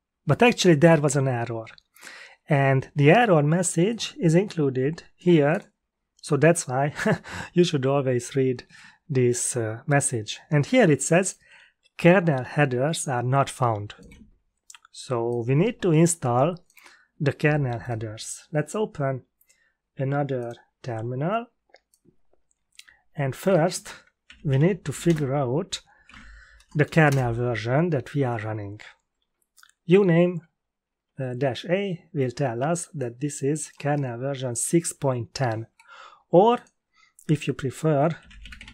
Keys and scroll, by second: 24.0-27.0 typing, 27.0 Return, 37.9-38.7 typing.